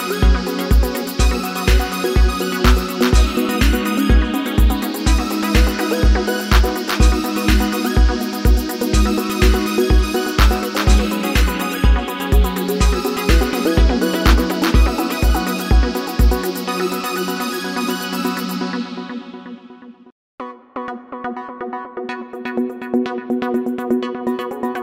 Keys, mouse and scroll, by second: 14.1 ctrl+KP_0.